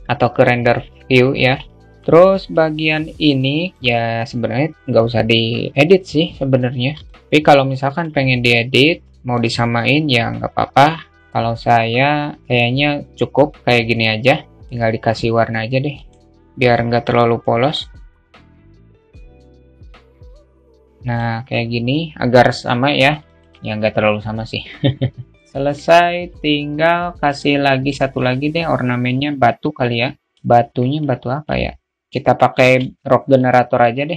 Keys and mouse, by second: 2.4-2.9 alt+shift+middle drag, 2.9 click, 6.8 alt+shift+middle click, 7.5 alt+shift+middle click, 14.4 shift+middle click, 16.5 click, 25.3 alt+shift+middle click, 30.4 alt+shift+middle click, 31.1 shift+a.